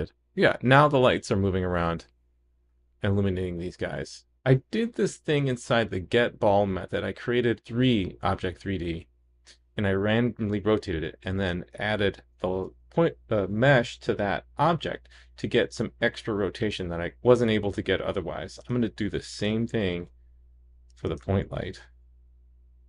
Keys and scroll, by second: 12.8 super+c, 19.5 super+v.